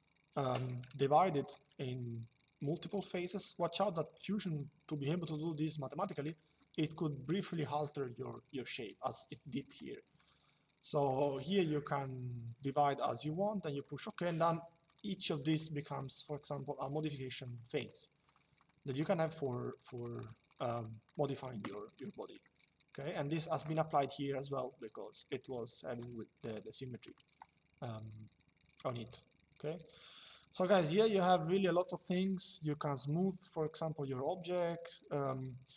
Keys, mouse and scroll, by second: 0.7 shift+middle click, 3.2 shift+middle click, 10.7 click, 13.4 click, 14.5 click, 22.1 shift+middle click, 25.0 shift+middle click, 26.1 click.